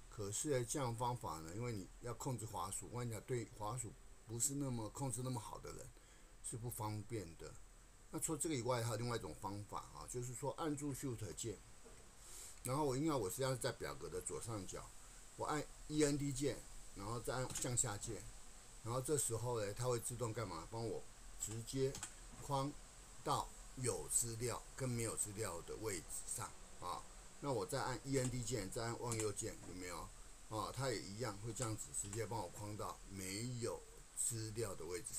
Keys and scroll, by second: 16.0 shift+End, 17.5 shift+Down, 21.4 shift+End, 22.0 shift+Down, 28.2 shift+End, 29.1 shift+Right, 31.5 shift+End, 32.1 shift+Right.